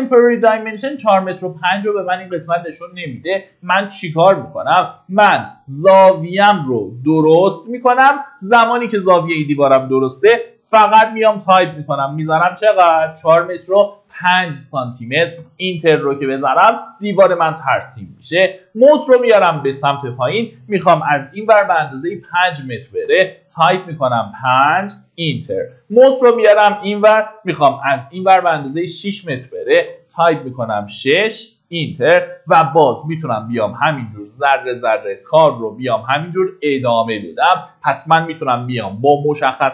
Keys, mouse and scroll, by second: 10.9 KP_4, 11.8 KP_Decimal, 12.1 KP_0, 13.4 KP_5, 28.4 KP_6, 30.8-31.1 scroll down 1, 31.5 middle click, 33.7 click.